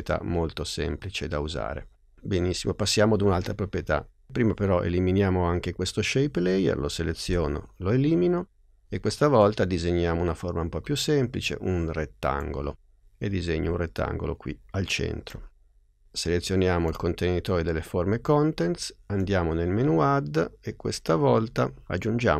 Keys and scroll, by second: 7.3 BackSpace.